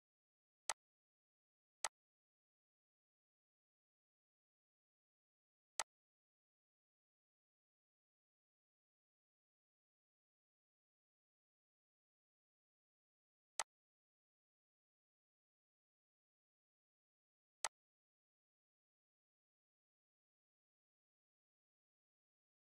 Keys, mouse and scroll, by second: 5.8-10.5 drag, 13.0-22.6 drag.